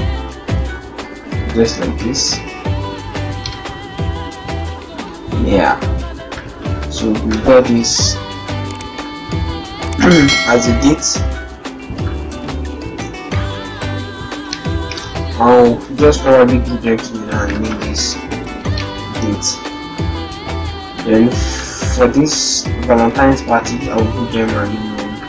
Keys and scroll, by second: 1.8 shift+Up, 8.2 ctrl+-, 8.6 ctrl+0, 9.4 ctrl+-, 10.4 ctrl+t, 15.2 ctrl+g, 18.4 shift+d, 24.1 ctrl+g.